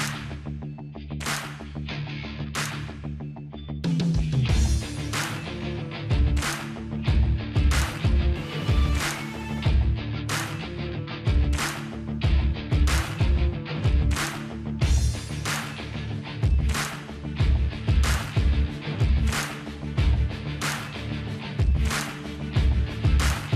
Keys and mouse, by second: 1.2-3.0 drag, 2.6 ctrl+i, 2.8 h, 3.0 middle click, 3.2-4.2 drag, 3.7 q, 4.2 middle click, 4.7 Tab, 4.8 a, 5.0 middle click, 5.8 click, 8.5 click, 9.5 middle click, 11.0-12.2 middle drag, 14.4 click, 15.3 middle click, 15.6 click, 16.7 ctrl+z, 16.7 middle click, 17.4 click, 19.1 middle click, 19.6 click, 20.6 middle click, 21.3 middle click, 21.6-22.6 drag, 22.6-23.5 middle drag, 23.1 ctrl+b.